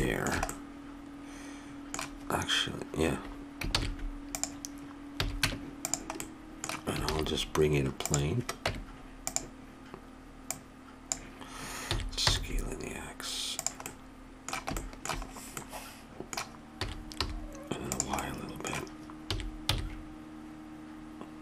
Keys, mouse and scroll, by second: 3.7 shift+s, 5.1 a, 5.5 Tab, 7.1 shift+a, 8.6 Tab, 11.9 s, 12.4-13.9 middle drag, 14.1 middle click, 16.7 s, 18.2-19.3 middle drag, 19.3 s.